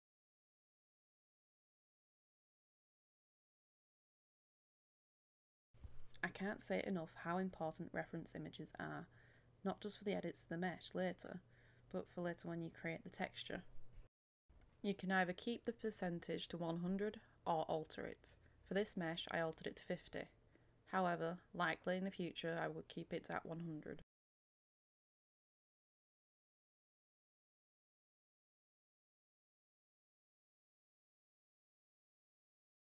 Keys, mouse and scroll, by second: 0.0 KP_1, 0.2 KP_0, 1.8 click, 2.5 a, 4.0-10.5 drag, 11.6 KP_5, 12.0 click, 12.9 KP_5, 13.4 click, 14.4 KP_5, 14.8 click, 15.0 middle click, 17.6-24.7 drag, 24.9 KP_8, 25.1 click, 25.4 middle click, 25.8 scroll down 1, 26.0 click, 26.4 KP_0, 26.6 click, 27.0 KP_8, 27.2 click, 28.0 scroll up 1, 28.2 click, 28.3 right click, 28.4-31.4 drag, 31.4 middle click, 31.5 click, 31.9 KP_5, 32.0 KP_0, 32.0-32.8 drag.